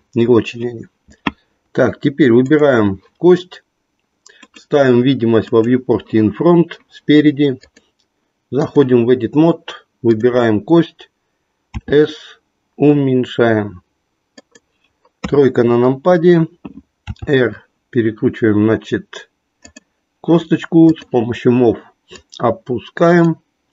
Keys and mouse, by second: 2.4 click, 4.4 click, 5.5 click, 7.6-8.8 drag, 11.6 s, 15.2 KP_3, 17.1 r, 20.8 click, 22.1-23.5 drag.